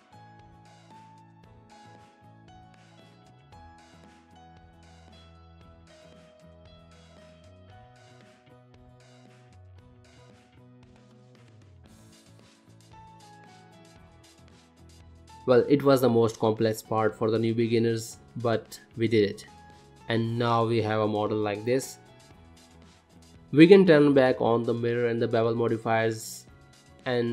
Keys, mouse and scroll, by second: 0.5 middle click, 2.9 click, 5.6 click, 6.2 g, 7.1 middle click, 8.0 click, 8.4 shift+click, 8.8 shift+click, 9.0 shift+click, 9.4 f, 9.8 ctrl+middle click, 10.1 middle click, 10.3 click, 10.8 g, 12.4 click, 12.8 g, 14.3 click, 15.3 middle click, 15.5 scroll down 2, 15.6 middle click, 16.6 shift+middle click, 17.7 click, 19.2 shift+middle click, 21.0 n, 23.2 click, 24.2 middle click, 25.9 middle click, 26.9 click.